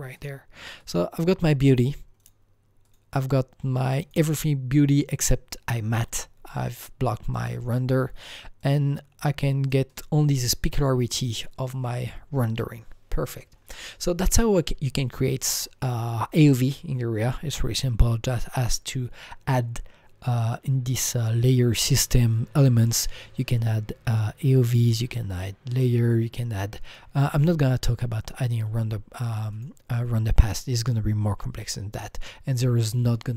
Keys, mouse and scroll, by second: 0.1 click, 0.8 click, 2.2 click, 2.8 click, 4.0 click, 7.7 click, 7.7 click, 8.6 click, 9.6 click, 13.6 click, 26.8 click, 26.8 click, 29.5 click, 30.4 click.